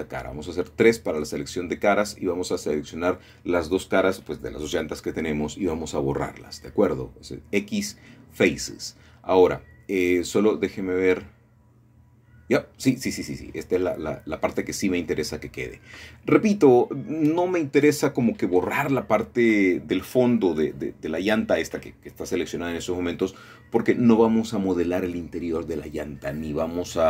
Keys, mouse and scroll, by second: 0.0 click, 2.4 middle click, 4.5 3, 6.6 click, 8.2-9.8 scroll down 2, 10.0-11.5 shift+drag, 11.7 x, 13.6 click, 14.5 click, 15.6 middle click, 16.2 click, 17.5 shift+click, 19.5 click, 21.9 ctrl+middle click, 24.0 ctrl+z, 24.7-25.1 scroll up 1, 25.5 scroll down 2, 26.5 shift+middle click.